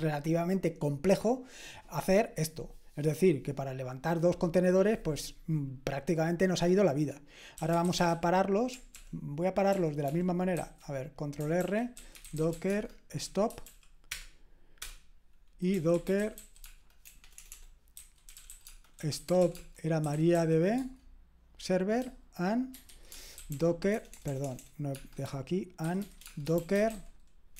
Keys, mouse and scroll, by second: 7.3-8.6 typing, 8.9 ctrl+p, 9.7 ctrl+p, 10.1 ctrl+p, 10.6 ctrl+c, 11.6 ctrl+r, 11.7-14.1 typing, 15.7 Return, 16.0-21.2 typing, 22.5-24.4 typing, 25.6-27.5 typing.